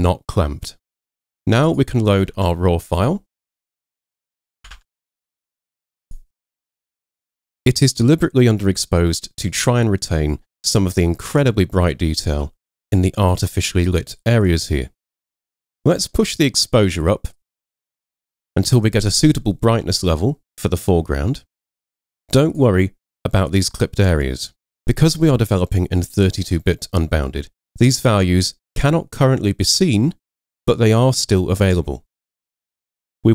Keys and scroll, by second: 2.4 super+Tab, 3.3 super+Tab, 4.8 super+Tab, 7.4 super+0, 32.6 super+0.